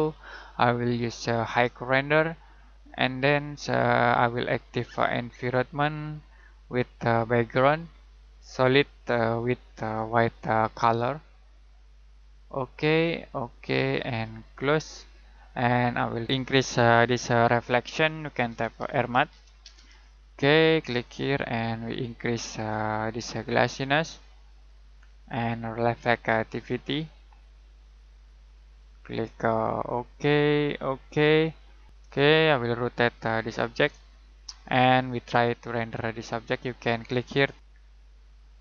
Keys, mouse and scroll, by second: 15.1 middle click, 15.8-16.2 scroll up 1, 18.2-19.8 typing, 20.8 click, 32.2 shift+middle click, 33.9 middle click, 36.6 click.